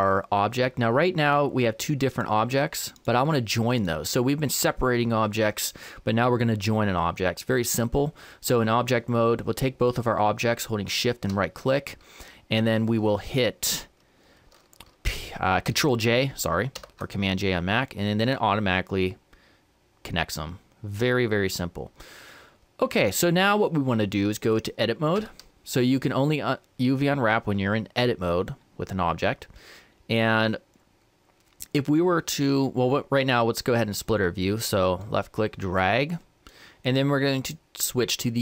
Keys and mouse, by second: 0.3-2.1 middle drag, 2.1-5.5 right drag, 10.9-12.7 right drag, 16.8 ctrl+j, 20.0-24.6 middle drag, 25.2 Tab, 28.6-33.0 middle drag, 35.0-38.4 drag.